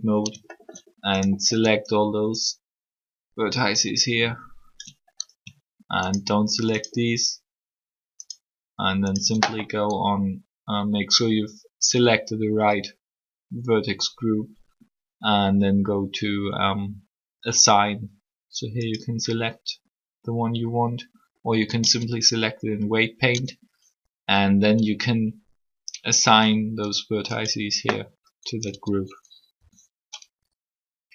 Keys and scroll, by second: 21.8 Tab, 23.3 Tab, 28.7 Tab, 29.5 r.